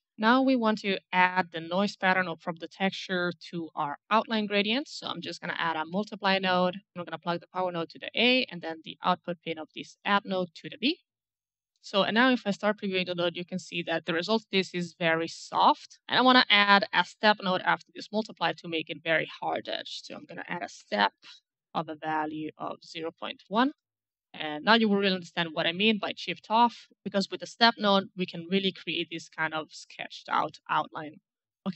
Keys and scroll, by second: 5.4 m, 19.2-20.5 typing, 20.9 Return, 23.4 KP_Decimal, 23.5 KP_1, 23.6 Return.